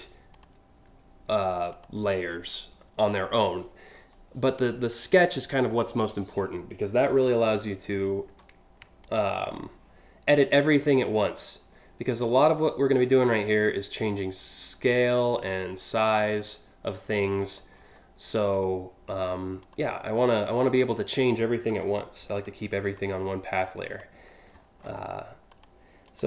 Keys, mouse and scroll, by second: 0.0 click, 1.3 click, 4.1 click, 6.6 a, 6.8 click, 7.9 a, 8.6 ctrl+click, 9.2-10.0 drag, 10.3 click, 10.7-11.9 drag, 12.8-17.1 drag, 17.4 scroll up 3, 18.1 click, 19.3 click, 20.1 scroll up 2, 21.3 a, 22.0 ctrl+click, 22.5 click, 22.8 scroll up 2, 23.5 click, 24.2-24.6 alt+scroll up 4, 25.1 click, 25.7 click.